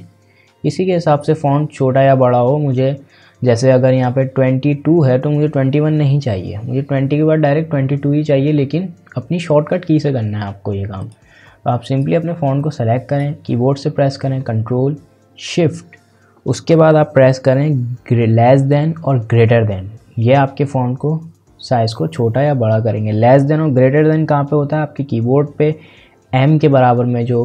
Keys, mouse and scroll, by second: 11.0-22.0 drag.